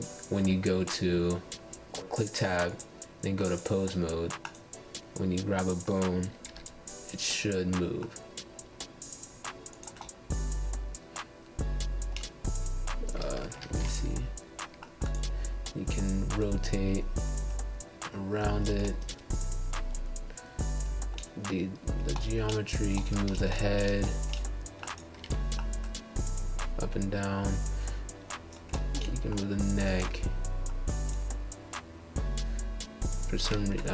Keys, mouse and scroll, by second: 0.7 Tab, 4.3 click, 6.5 click, 7.4-8.7 drag, 11.0 ctrl+z, 11.4-12.5 middle drag, 12.5 click, 14.7 middle click, 15.6 click, 17.3-18.4 middle drag, 18.4 click, 19.7 click, 21.1 ctrl+z, 21.9 click, 23.4 ctrl+z, 23.8 click, 24.1 ctrl+z, 24.5 scroll up 5, 24.7 shift+middle click, 25.2 click, 25.5 click, 27.1 ctrl+z, 27.3 middle click, 28.1 click, 28.7 click, 30.4 ctrl+z, 30.6 scroll down 1, 30.9 click, 31.4 click, 32.0 click, 32.4 click, 33.1 shift+middle click.